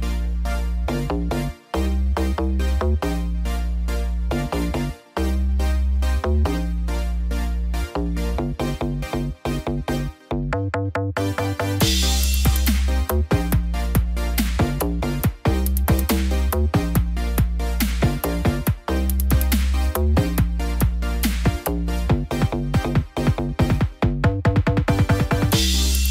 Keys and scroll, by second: 4.5 ctrl+=, 11.6 ctrl+t, 13.6 ctrl+=, 14.0 ctrl+j, 14.3 ctrl+t, 17.7 ctrl+0.